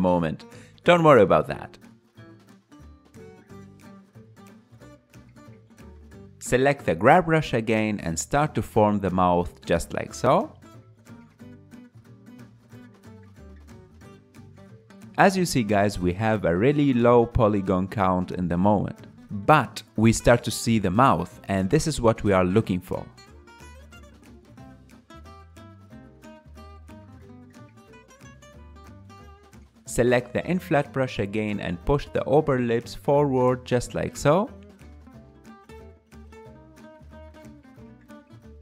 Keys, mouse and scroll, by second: 0.5-3.6 ctrl+middle drag, 3.6 click, 4.5 KP_1, 6.0-7.3 drag, 7.3-8.5 ctrl+middle drag, 8.5 f, 9.4-13.1 drag, 13.1 middle click, 13.8-14.9 drag, 14.9 KP_1, 15.5 ctrl+middle click, 15.8-24.4 drag, 24.4 ctrl+middle click, 25.3-26.8 drag, 26.8 middle click, 27.7 click, 28.0-32.4 ctrl+middle drag, 32.4 click, 32.9-34.1 ctrl+middle drag, 34.1-37.2 drag, 37.7-38.6 middle drag.